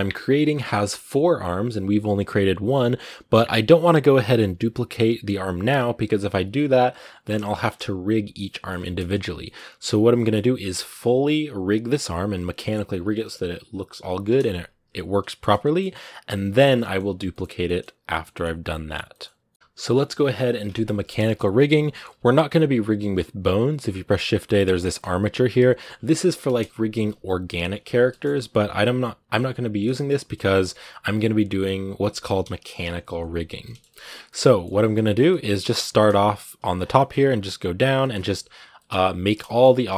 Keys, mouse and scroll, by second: 10.9-11.6 scroll down 2, 11.6-14.1 scroll up 1, 15.1 shift+middle click, 16.0 scroll up 1, 16.1-24.7 middle drag, 24.7 shift+a, 24.8 scroll down 2, 25.0 g, 26.1 KP_Decimal, 27.7-28.3 scroll down 4, 27.9 middle click, 29.7 shift+middle click, 30.5 x, 31.6 right click, 32.6 KP_Decimal, 33.3 a, 33.4 shift+middle click, 34.4 shift+scroll up 1, 34.6 scroll down 2, 34.8 shift+middle click, 35.4 scroll up 2, 35.6 shift+middle click, 36.6 scroll down 3, 36.8-37.9 shift+middle drag, 37.9-38.3 scroll up 1, 38.6-39.8 middle drag, 39.8 scroll up 2, 39.9 shift+middle click.